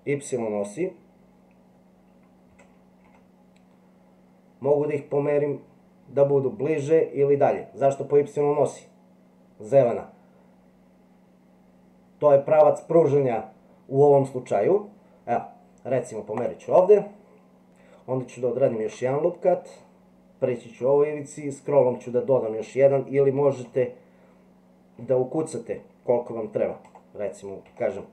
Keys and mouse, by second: 2.5 s, 18.7 ctrl+r.